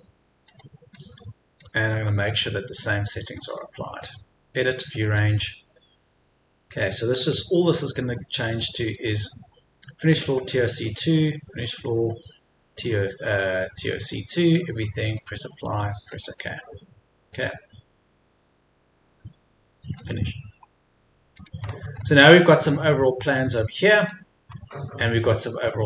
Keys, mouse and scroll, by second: 0.5 click, 1.8 middle click, 3.3 click, 3.7 middle click, 4.5-14.3 drag, 21.6-22.1 scroll up 1, 22.7-23.1 scroll down 1, 23.3 middle click, 24.0-24.5 scroll up 1, 24.5 middle click.